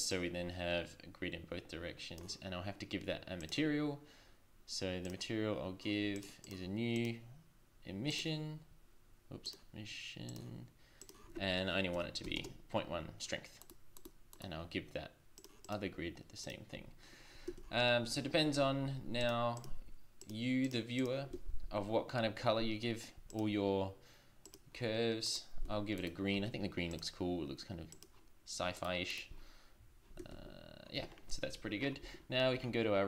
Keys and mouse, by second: 0.1 click, 3.4-8.7 drag, 9.4-12.6 drag, 17.6 shift+z, 18.2 shift+z, 19.3-20.4 middle drag, 21.3 shift+z, 25.6 z, 30.3 shift+z, 30.3 click, 30.7-32.2 middle drag, 32.2-33.0 drag.